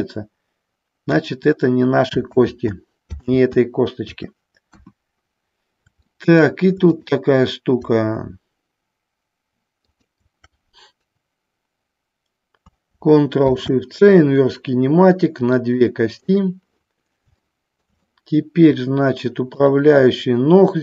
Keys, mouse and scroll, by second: 1.3 click, 2.4 ctrl+z, 3.4 ctrl+z, 4.8 KP_1, 6.2 shift+middle click, 7.0-9.5 drag, 9.9-12.3 shift+drag, 16.3 click, 17.4 shift+middle click, 18.2 middle click, 19.7-20.8 drag.